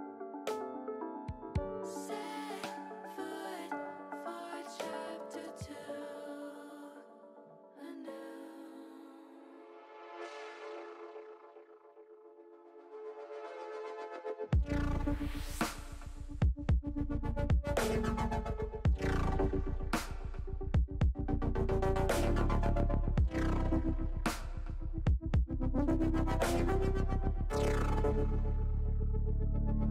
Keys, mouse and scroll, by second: 0.8-1.8 drag, 2.0 middle click, 3.1 middle click, 4.6 click, 5.6 click, 6.7 middle click, 7.6 click, 8.6 ctrl+click, 9.4-10.8 drag, 11.5 click, 12.4 middle click, 13.6 ctrl+z, 14.4 KP_3, 16.8-18.8 drag, 20.7 middle click, 21.7-23.8 middle drag, 24.0 middle click, 29.8 click.